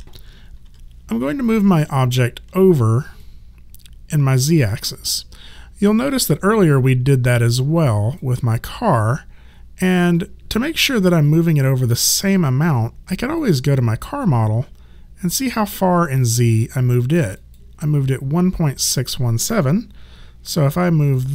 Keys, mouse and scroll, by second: 0.6 w, 1.4 alt+click, 7.3 alt+click, 10.2 alt+click, 17.4 click, 21.0 click.